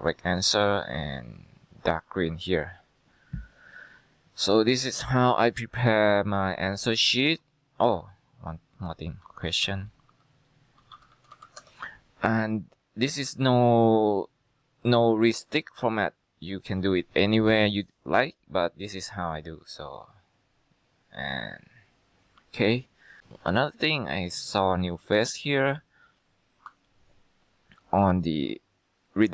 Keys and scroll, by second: 9.3-11.9 typing.